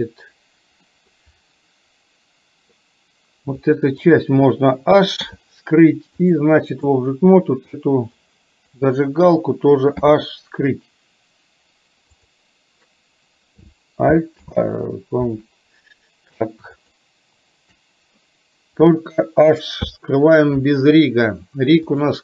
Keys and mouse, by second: 0.9 middle click, 3.7 click, 5.2 h, 6.2 click, 8.2 click, 10.1 h, 12.3 click, 14.4 ctrl+z, 16.8 shift+click, 19.8 h, 21.9-22.2 drag.